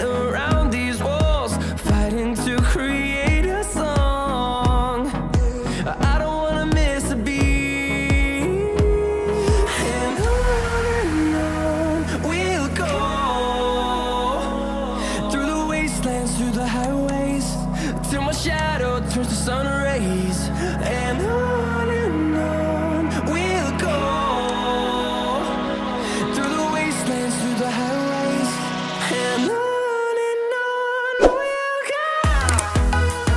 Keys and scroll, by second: 11.4 ctrl+t.